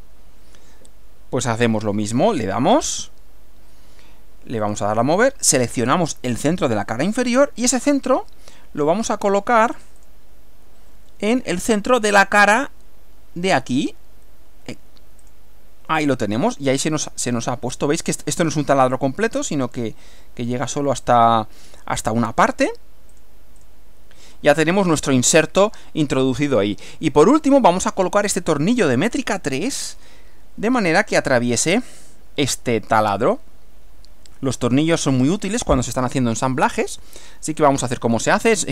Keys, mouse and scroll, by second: 2.7 click, 4.6 click, 6.8 click, 9.1 click, 10.0 click, 15.2 click, 16.4-18.2 middle drag, 19.4-20.8 middle drag, 23.1 click, 23.6 click, 24.3 middle click, 25.4-26.7 middle drag, 27.1 middle click, 29.4-30.1 middle drag, 32.6-34.7 middle drag, 35.1-36.8 middle drag, 37.0-37.7 middle drag.